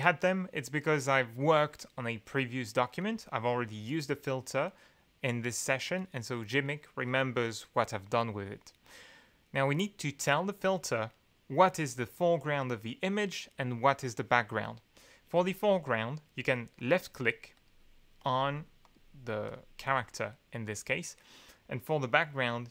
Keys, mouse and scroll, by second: 16.7 click, 17.5 click, 18.2 click, 18.8 click, 19.4 click.